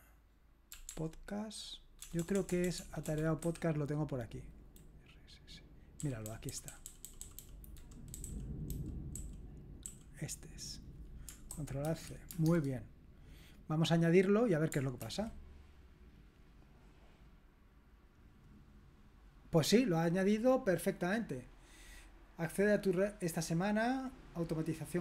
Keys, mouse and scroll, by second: 0.5-3.6 typing, 6.0 Down, 6.2 Down, 6.5 Down, 6.7 Down, 7.0 Down, 7.2 Down, 7.4 Down, 8.1 Down, 8.2 Up, 8.7 Down, 9.1 Up, 9.3-9.8 typing, 11.5 ctrl+a, 11.8 ctrl+c, 12.6 alt+Tab, 14.1 click, 15.0 ctrl+v, 15.6 click, 17.2-19.3 drag.